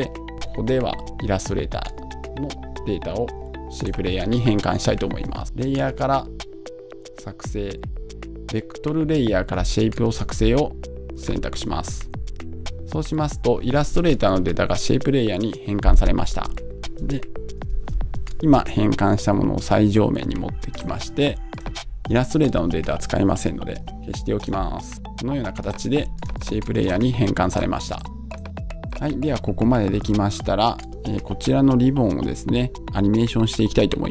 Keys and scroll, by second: 23.8 BackSpace.